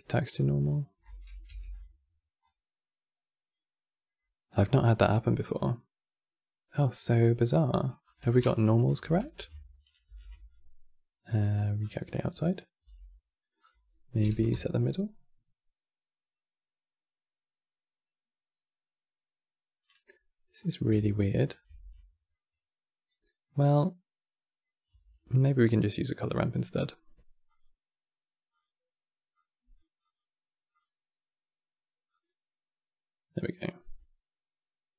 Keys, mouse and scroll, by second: 0.7 click, 1.2 g, 2.1-3.7 drag, 3.7-4.2 middle drag, 4.2 click, 5.1 middle click, 5.4-6.6 middle drag, 7.0-7.7 middle drag, 8.1 Tab, 8.7 a, 10.1 alt+n, 12.7 Tab, 13.3-16.0 drag, 16.0 middle click, 17.2-19.0 middle drag, 20.3 click, 20.9 alt+click, 21.6 x, 22.0-24.6 middle drag, 24.6 q, 27.2-34.9 drag.